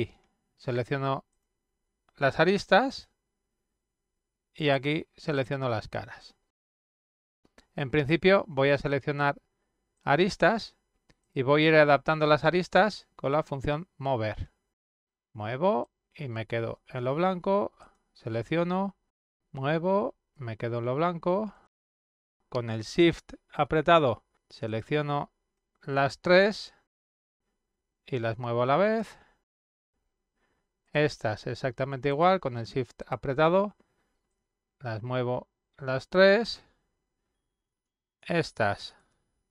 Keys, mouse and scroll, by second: 2.1 click, 3.0 click, 5.2 click, 5.8 click, 9.1 click, 10.2 click, 13.6 click, 15.0-17.0 drag, 17.8 click, 19.1-20.3 drag, 21.3 click, 24.7 shift+click, 25.9 shift+click, 27.3-28.9 drag, 30.1 click, 31.1 shift+click, 31.9 shift+click, 32.9-34.5 drag, 36.2 click, 36.8 shift+click, 37.7 shift+click, 38.6 shift+click.